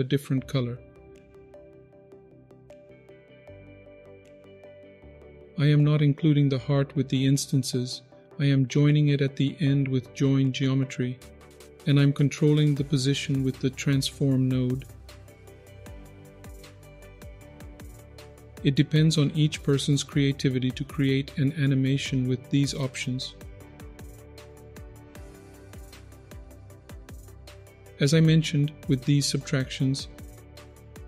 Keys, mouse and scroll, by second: 0.6 click, 1.7 click, 2.2 click, 3.0 click, 3.4 KP_0, 3.7-4.1 scroll down 3, 3.9-4.2 scroll up 3, 4.3-4.7 shift+middle drag, 5.0 click, 5.3-5.9 scroll down 3, 5.9-6.6 middle drag, 8.1-10.7 scroll up 6, 10.7-11.1 scroll down 3, 11.1 middle click, 11.6-13.7 scroll up 8, 14.0-15.4 shift+drag, 15.6 ctrl+z, 15.8 shift+click, 17.2 ctrl+z, 17.2 middle click, 17.9-18.3 scroll down 5, 18.1 middle click, 18.4 middle click, 18.6-19.7 scroll up 4, 19.7-23.2 drag, 23.7 ctrl+z, 24.1 click, 24.9 ctrl+z, 25.1-26.7 drag, 26.8 ctrl+z, 27.3 middle click, 27.5-27.8 scroll down 4, 27.7 middle click, 27.8 click, 29.4 click.